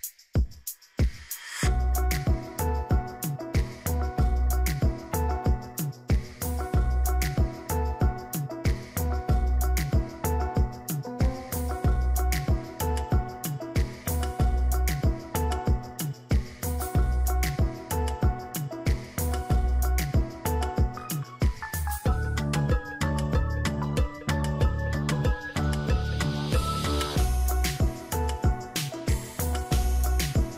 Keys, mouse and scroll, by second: 1.8 ctrl+j, 2.3 ctrl+click, 5.5 ctrl+j, 6.1 ctrl+click, 7.0 ctrl+click, 9.8 ctrl+j, 10.5 ctrl+click, 16.7 ctrl+t, 18.1 shift+click, 21.3 shift+click.